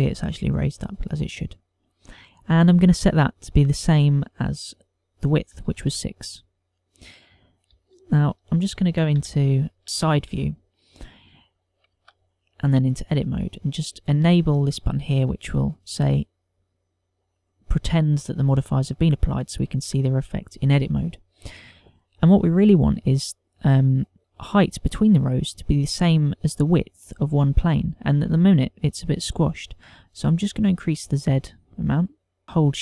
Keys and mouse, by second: 0.0 middle click, 1.2 middle click, 4.2 click, 8.5 KP_1, 9.8 shift+middle click, 9.8 KP_3, 10.1 ctrl+middle click, 10.9 shift+middle click, 11.3 ctrl+middle click, 11.8 shift+middle click, 12.8 Tab, 16.2 click, 31.2 click, 32.4 shift+click.